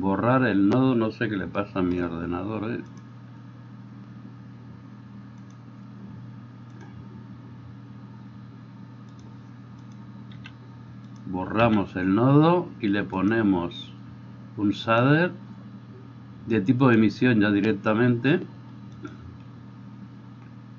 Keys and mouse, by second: 6.8-9.3 drag, 9.3 middle click, 9.8 click, 10.0-13.2 middle drag, 10.4 x, 11.0 click, 11.6 x, 13.2-19.1 drag, 19.1-20.7 middle drag.